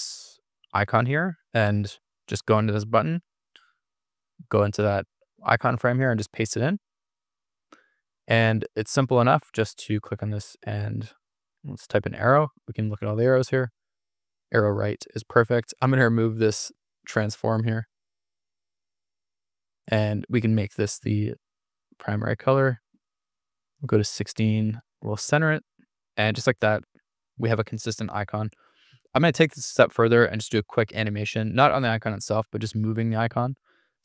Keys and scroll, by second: 0.1 super+c, 3.2 super+=, 5.7 super+v, 11.1-12.3 typing, 22.9-23.7 typing, 26.9 super+-, 30.8 super+d.